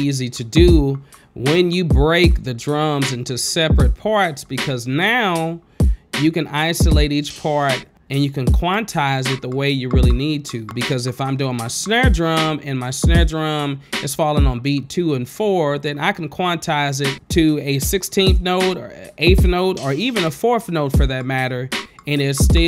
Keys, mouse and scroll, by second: 1.6 click, 2.1 click, 3.5 click, 4.2 click, 10.1 click, 13.7 click, 14.9 click, 15.8 space.